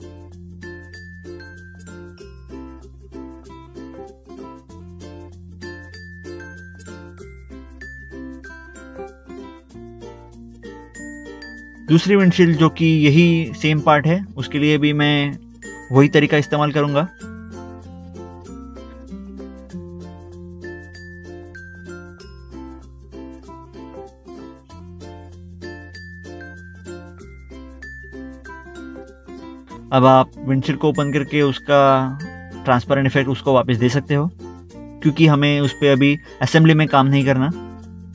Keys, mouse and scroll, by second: 0.5 click, 1.5 scroll up 1, 1.9 scroll down 1, 5.4 scroll up 1, 7.0 click, 7.4 middle click, 8.3 middle click, 9.4 ctrl+click, 10.1 ctrl+click, 11.3 middle click, 13.0 middle click, 13.6 click, 15.0 click, 17.1 click, 17.7 right click, 17.9 click, 18.3 middle click, 18.4 middle click, 18.6 click, 18.8 middle click, 19.0 middle click, 19.4 click, 19.5 scroll down 1, 19.7 middle click, 20.3 click, 20.4 scroll up 1, 20.8 click, 20.8 scroll down 1, 21.0 scroll up 1, 21.4 click, 22.0 click, 22.1 middle click, 22.2 middle click, 22.3 scroll down 1, 22.7 click, 22.8 scroll up 1, 22.9 middle click, 23.1 scroll down 1, 23.4 middle click, 23.4 middle click, 23.6-24.0 scroll down 2, 23.9 click, 24.3 scroll up 1, 24.5 click, 25.1 middle click, 25.7 ctrl+s, 25.8 click, 25.9 middle click, 26.1 middle click, 26.4 click, 28.6 middle click, 29.0 middle click, 31.8 middle click, 32.2 ctrl+Tab, 32.8 middle click, 33.4 middle click, 34.8 click.